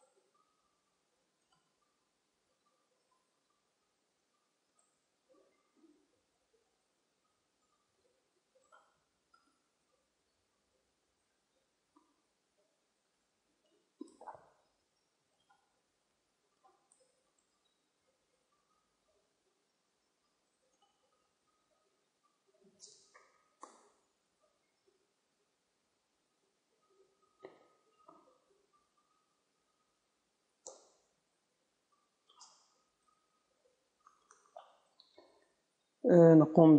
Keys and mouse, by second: 2.2 Tab, 2.2-9.7 drag, 3.1 Tab, 6.0 Tab, 7.2 Tab, 9.7-11.9 right drag, 11.0 a, 11.2 a, 22.0-23.9 middle drag, 23.6 KP_0, 24.7 z, 26.8 Tab, 27.0-28.3 middle drag, 28.3 alt+h, 30.0 z.